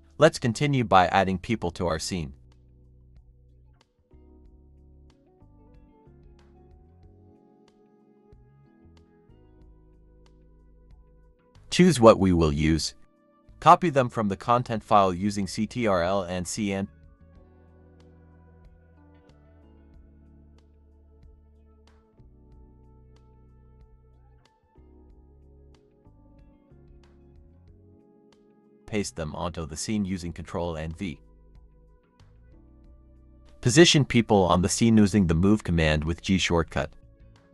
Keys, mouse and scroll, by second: 13.5 h, 15.0 Escape, 15.2 Escape, 15.9 scroll up 1, 17.2 shift+click, 19.1 shift+click, 20.5 shift+click, 21.8 shift+click, 23.0 shift+click, 23.6 shift+click, 25.1 shift+click, 28.5 ctrl+c, 28.8 scroll up 1, 29.0 ctrl+v, 29.6 scroll up 1, 30.0 0, 30.8 scroll up 1, 31.5-31.9 scroll up 1, 31.9 scroll down 1, 32.0-34.8 typing, 36.5 Escape.